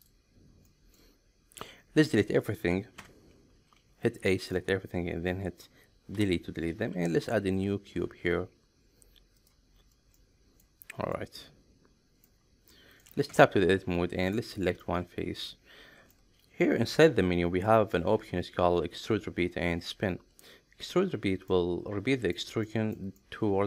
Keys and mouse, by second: 0.7 middle click, 2.9 Tab, 3.9 a, 4.3 middle click, 6.2 Delete, 6.9 shift+a, 10.2-10.6 middle drag, 11.1-12.2 middle drag, 12.7-13.0 middle drag, 13.3 Tab, 14.2 click, 14.8-16.1 middle drag, 17.0 alt+e, 21.5-22.4 middle drag, 22.6 shift+middle click, 23.2-23.6 middle drag.